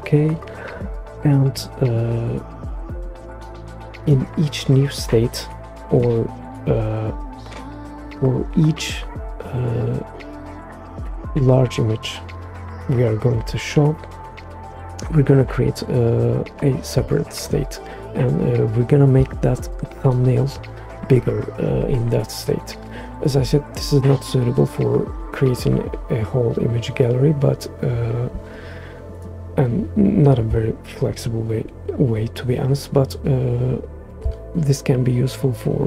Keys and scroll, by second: 11.1 1, 12.0 Return.